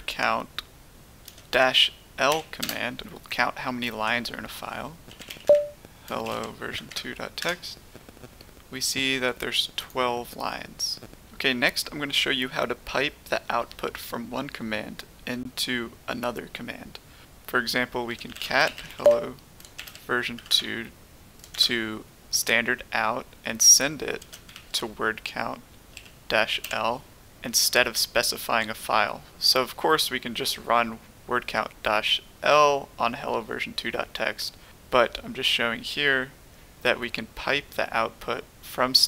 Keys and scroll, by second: 1.2-2.6 typing, 4.8-6.7 typing, 6.9 Tab, 7.4 Return, 18.0-22.0 typing, 24.4-26.6 typing.